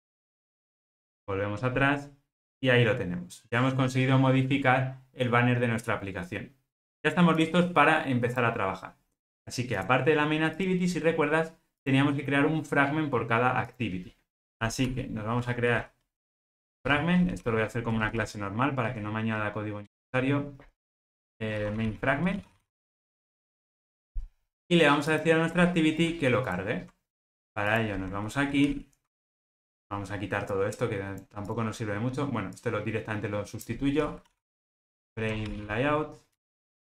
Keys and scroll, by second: 14.9 super+n, 26.6 super+b, 28.6 ctrl+alt+o, 36.5 Return.